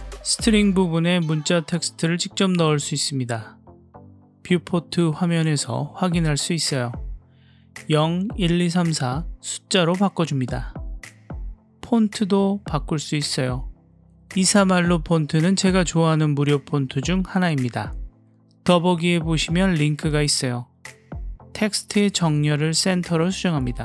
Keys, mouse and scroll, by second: 1.4-2.8 drag, 3.7 click, 4.3 KP_7, 4.9 scroll up 4, 5.4-5.7 shift+middle drag, 7.5-10.1 drag, 11.9 click, 21.7-22.9 drag.